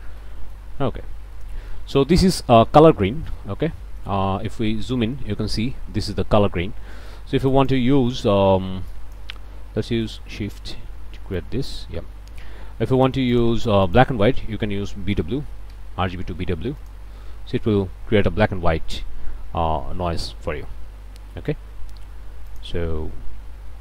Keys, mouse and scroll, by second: 0.2 middle click, 0.3 click, 0.7-1.4 scroll down 2, 1.4 click, 2.0 space, 2.3-3.1 scroll up 1, 3.1 ctrl+space, 3.6-4.0 ctrl+scroll up 2, 3.7 ctrl+click, 4.0 middle click, 4.2 middle click, 5.0-5.6 scroll up 1, 6.9 click, 7.5 click, 8.1 click, 8.9 click, 10.1 shift+right click, 11.4 click, 12.7 g, 13.0 click, 13.6 shift+a, 13.9 shift+click, 15.1 b, 15.2 w, 15.7 Return, 16.8 click, 18.2-18.8 scroll down 2, 19.1-20.2 scroll down 2, 20.5-21.0 scroll up 2, 22.5 click, 23.5 scroll down 2.